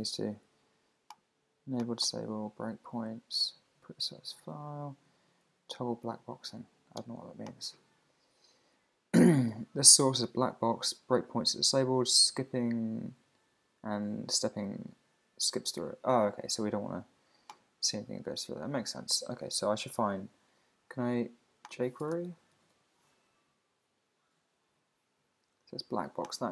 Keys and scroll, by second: 23.3 Down, 24.7 Return.